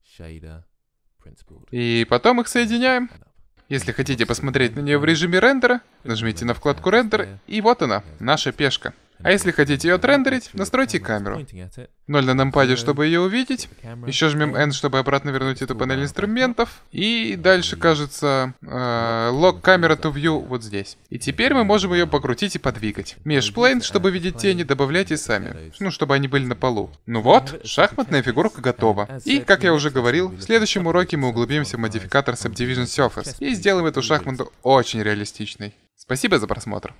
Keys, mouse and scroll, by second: 3.2 click, 4.7-6.6 drag, 11.3 KP_0, 14.5 n, 18.5-20.2 middle drag, 20.2-22.0 drag, 22.0-24.3 middle drag.